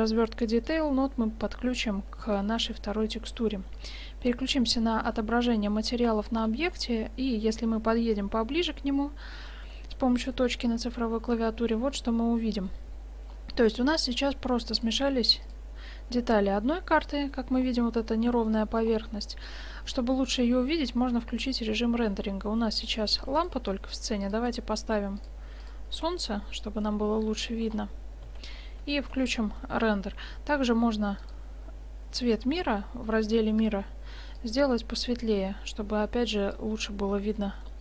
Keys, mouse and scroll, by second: 0.7-3.3 drag, 4.0 z, 5.3-6.6 middle drag, 6.6-7.0 drag, 8.7 click, 8.7 KP_Decimal, 10.7 drag, 10.9 click, 11.1 click, 13.4 middle click, 14.8 middle click, 15.4-16.5 drag, 17.6 middle click, 18.2 middle click, 18.3-18.6 middle drag, 18.7 middle click, 19.7 middle click, 20.0 shift+z, 20.4-21.5 middle drag, 21.1 shift+z, 22.9 right click, 23.3 x, 24.3-24.6 drag, 24.3-24.6 right drag, 24.4 shift+a, 24.8 click, 24.8 right click, 26.0 r, 26.9-27.6 middle drag, 27.9 middle click, 28.4 shift+z, 33.0-35.4 drag, 37.4-37.8 middle drag.